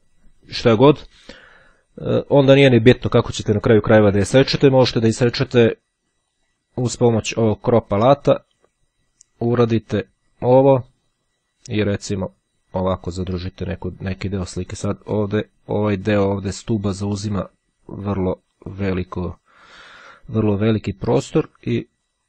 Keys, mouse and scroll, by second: 6.2-7.3 drag, 9.2-14.9 drag, 17.2-19.7 drag, 21.8-22.2 drag.